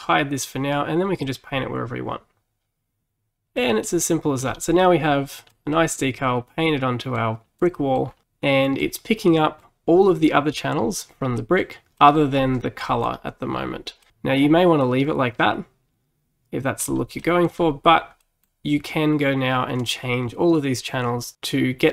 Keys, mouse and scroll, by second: 3.9 middle click, 4.5-4.8 scroll up 4, 4.8-8.1 middle drag, 8.1 scroll down 3, 9.1 scroll up 1, 9.3-12.4 middle drag, 12.4-12.9 scroll up 3, 12.9 middle click, 13.6-14.1 scroll down 3, 14.1-16.9 middle drag, 16.9-17.2 scroll up 3, 17.2 middle click, 17.6-18.3 scroll down 3, 18.3-21.3 middle drag.